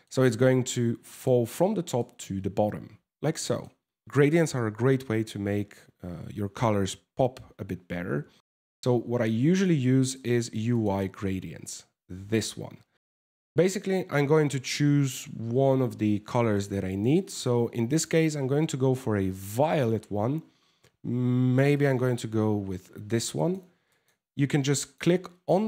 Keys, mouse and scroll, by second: 0.7 middle click, 1.6 middle click.